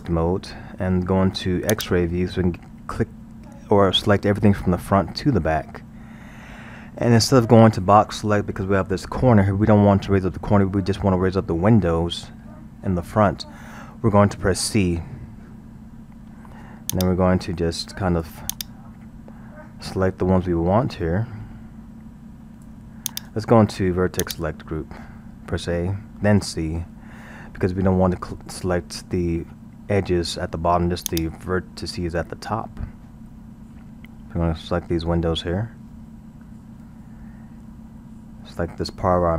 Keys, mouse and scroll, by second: 1.7 click, 15.7 c, 24.2 click, 25.9 a, 26.4 c.